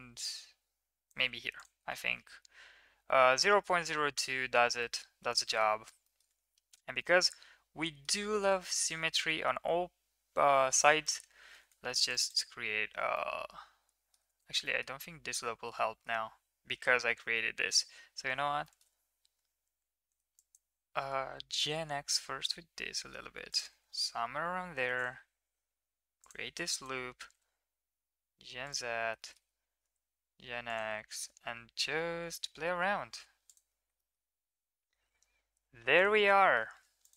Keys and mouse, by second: 1.5 click, 1.9-4.5 middle drag, 4.8 middle click, 5.3 shift+middle click, 5.5 middle click, 6.0 middle click, 6.3 Tab, 7.0-8.0 middle drag, 8.2 Tab, 8.7 Tab, 8.9 middle click, 11.1 middle click, 11.9 ctrl+r, 13.1-14.2 middle drag, 14.3 ctrl+z, 14.6 middle click, 15.0 middle click, 17.7 KP_1, 18.6 middle click, 20.3 click, 24.7 ctrl+r, 26.7-28.6 drag, 27.2 g, 29.2 shift+middle click, 29.7 g, 30.8 g, 34.1 middle click, 34.6 Tab, 35.9 click, 36.4 middle drag, 37.0 middle click.